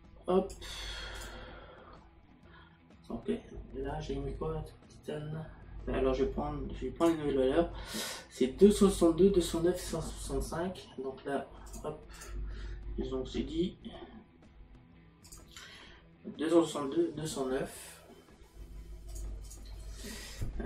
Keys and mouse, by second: 1.2 click, 7.0 click, 11.7 click, 19.1 click.